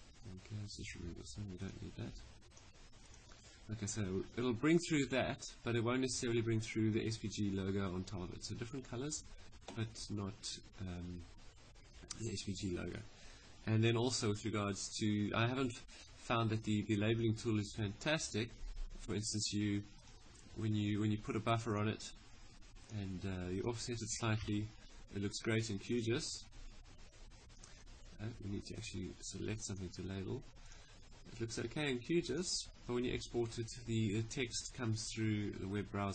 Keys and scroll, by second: 24.1 3.